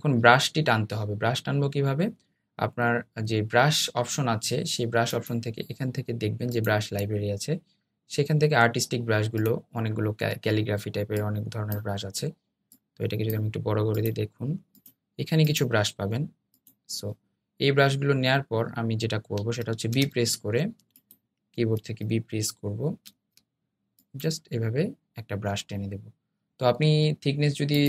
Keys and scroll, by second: 19.4 b, 26.5 super+z.